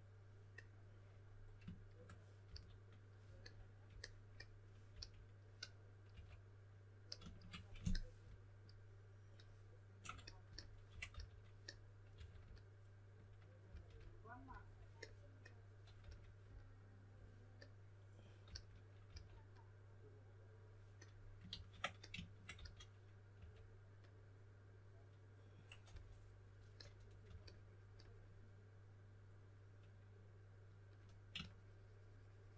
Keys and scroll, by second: 2.4 s, 4.9-6.6 typing, 10.6-12.1 typing, 13.6 s, 16.0 s, 18.4-19.0 typing, 21.5 super+z, 22.5-23.8 typing, 25.8 typing, 27.2 typing.